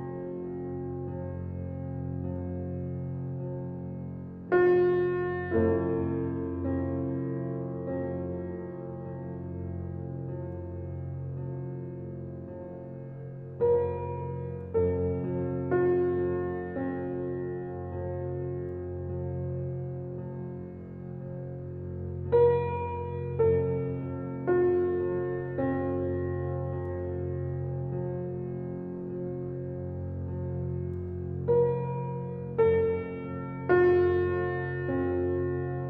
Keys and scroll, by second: 13.8 s, 16.1 g, 30.0 g, 32.4 g.